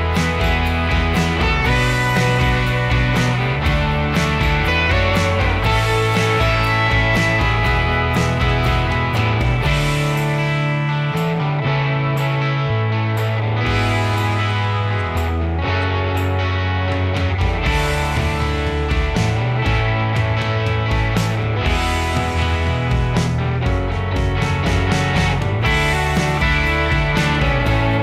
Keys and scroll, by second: 0.1 Escape, 8.1 l, 9.2 ,, 10.0 8, 10.2 Return, 10.9 1, 11.1 Return, 12.5-15.1 typing, 16.2-18.5 typing, 18.7 ctrl+g, 21.4 m, 25.1 Escape, 25.3-26.3 typing, 27.4 Escape, 27.9 m.